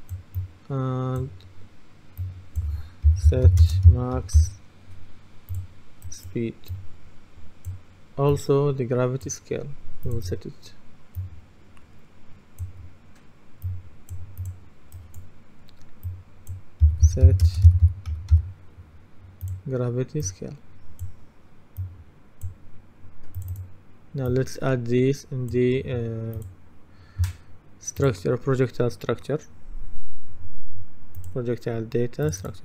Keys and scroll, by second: 2.9-4.9 typing, 16.6-18.9 typing.